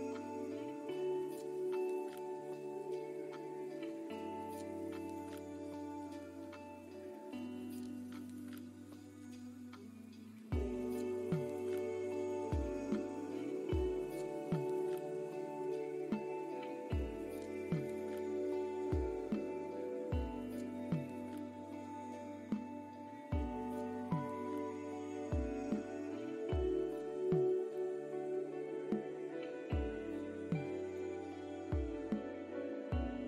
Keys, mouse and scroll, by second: 0.6 scroll down 1, 0.9 middle click, 1.9-2.3 scroll down 2, 2.3 middle click, 4.3-4.8 scroll down 2, 4.8-5.4 scroll up 3, 5.4 click, 6.7 scroll down 1, 7.0-7.3 scroll up 4, 7.8 click, 10.1 click, 10.7 scroll up 2, 11.8 click, 18.4 scroll down 1, 19.0 scroll up 1, 19.4 middle click, 21.5 middle click, 27.8 click, 29.6-29.9 scroll down 1, 29.9 middle click, 30.7-31.3 scroll down 3, 31.2-31.6 scroll up 3, 32.7 middle click.